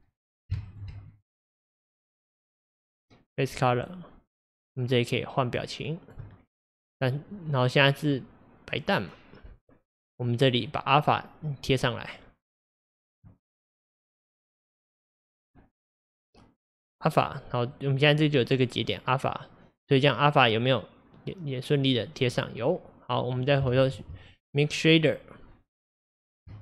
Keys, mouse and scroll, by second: 0.8 ctrl+shift+click, 3.8-8.3 drag, 8.3-11.4 middle drag, 11.4-13.2 drag, 17.8-24.0 drag.